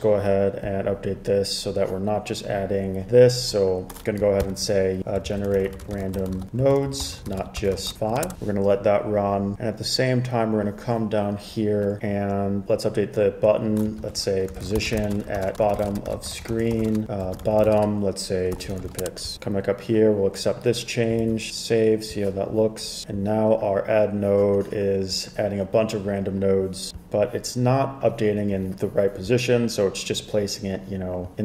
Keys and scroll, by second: 4.6 super+k, 5.0-8.8 typing, 14.2 super+k, 14.4-19.6 typing, 21.3 super+s.